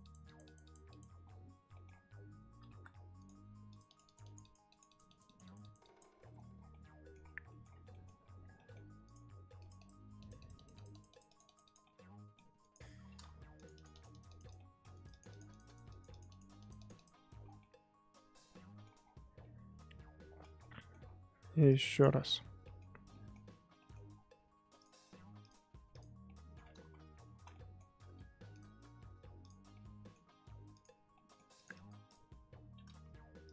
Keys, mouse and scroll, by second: 1.2-1.7 scroll down 5, 1.7 middle click, 1.9-2.7 scroll up 3, 2.7 f, 3.7-6.3 drag, 6.3-6.7 scroll down 10, 6.7 middle click, 7.2-7.9 scroll up 9, 7.5 middle click, 7.9 middle click, 8.3 scroll down 1, 8.5 middle click, 8.8 f, 9.5-11.8 drag, 11.8 middle click, 12.6 click, 13.3 ctrl+z, 13.5-14.5 drag, 14.5 middle click, 14.9-17.4 drag, 17.4 scroll down 1, 17.6-18.9 middle drag, 18.9 scroll up 1, 19.0-19.4 scroll down 5, 19.4 middle click, 20.4 scroll up 1, 20.7 middle click, 20.9-21.7 scroll up 2, 21.7 click, 22.0 click, 22.1 middle click, 22.3-22.6 scroll up 4, 22.6 middle click, 22.8-23.1 scroll down 1, 23.1 middle click, 23.4-23.8 scroll up 4, 23.8 middle click, 24.1-24.8 scroll down 3, 24.8-26.2 drag, 26.2 middle click, 26.8 ctrl+z, 27.3 ctrl+z, 27.5-28.5 middle drag, 28.5-29.7 drag, 29.7-30.7 middle drag, 30.7 click, 31.1 middle click, 31.5-33.5 drag.